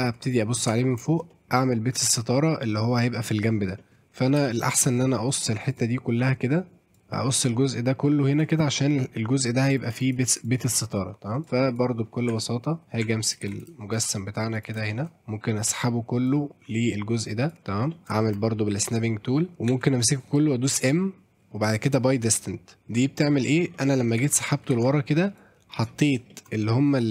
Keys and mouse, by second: 0.4 middle click, 0.5 middle click, 0.7 Tab, 1.1 shift+middle click, 1.3 middle click, 2.0 a, 2.5 middle click, 3.8 middle click, 4.4 KP_7, 5.7 click, 6.9 click, 7.1 click, 8.6 click, 11.4 click, 11.7 click, 12.3 Tab, 13.0 Tab, 13.5 shift+z, 14.5 click, 14.9 shift+middle click, 15.2 click, 16.3-17.5 drag, 17.9 middle click, 18.2 shift+middle click, 19.7 a, 20.8 m, 23.8 middle click, 24.2 ctrl+z, 24.7 ctrl+z, 25.4 click, 26.3 shift+middle click, 26.5 middle click, 26.9 click.